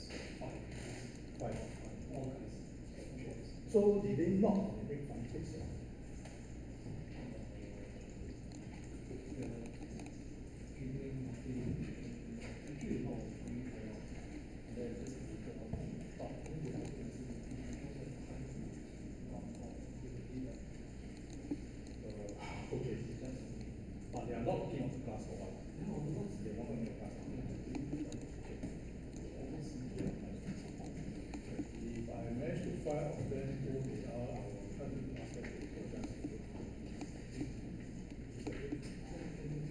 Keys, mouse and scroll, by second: 28.1 space.